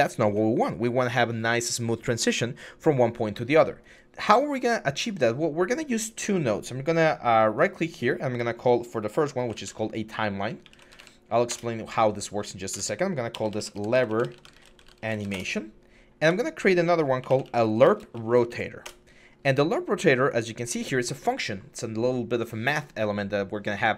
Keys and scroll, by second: 9.2-10.8 typing, 11.3 Return, 12.5-15.3 typing, 16.1 Tab, 16.8-18.8 typing.